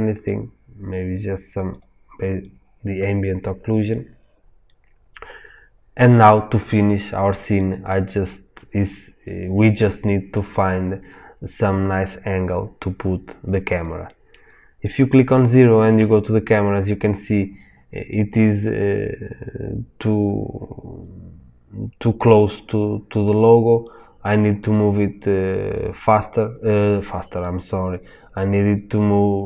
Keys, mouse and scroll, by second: 1.7 click, 10.3-29.4 middle drag, 15.9 KP_0.